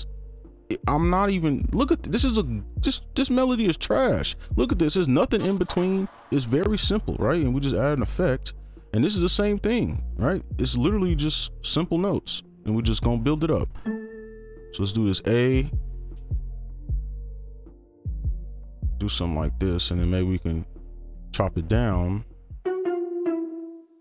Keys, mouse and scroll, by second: 1.3-1.8 scroll down 1, 1.8-2.7 scroll up 1, 3.4 ctrl+click, 4.0 scroll down 1, 4.3-5.6 scroll up 1, 5.6 double click, 5.8 right click, 8.5 scroll down 1, 8.7 scroll up 1, 10.3-10.6 scroll down 1, 10.8-11.5 scroll up 1, 11.5 right click, 14.6 alt+click, 16.0 click, 20.8 right click, 23.6 click.